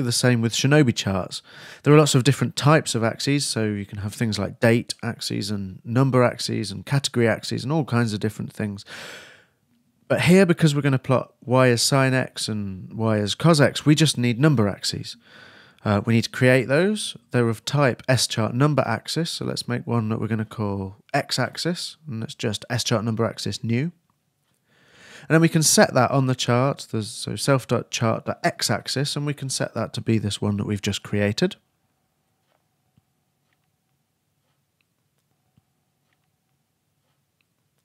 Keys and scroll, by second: 17.3-20.1 typing, 21.2 shift+8, 21.5 shift+x, 23.8-24.9 typing, 25.5 shift+Return.